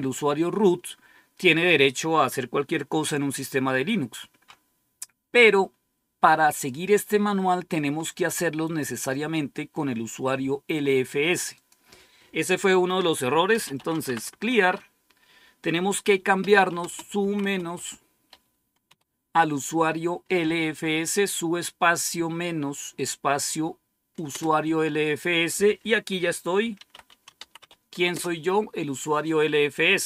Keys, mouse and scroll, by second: 11.4 click, 13.2-14.5 typing, 16.1-18.8 typing, 24.2 Return, 26.3-28.0 typing, 28.0 Return.